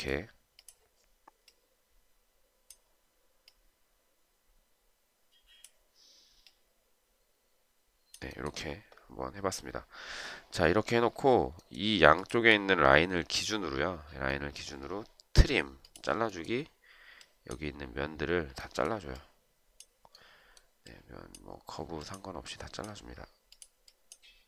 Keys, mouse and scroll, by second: 12.3 shift+click.